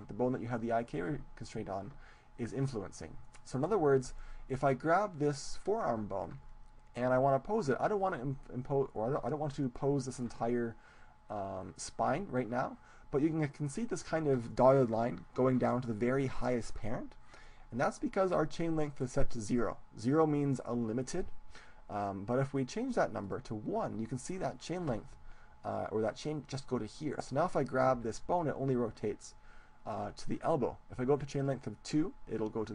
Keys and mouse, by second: 1.1 click, 23.3-25.2 drag, 28.9 g, 30.1-32.7 drag.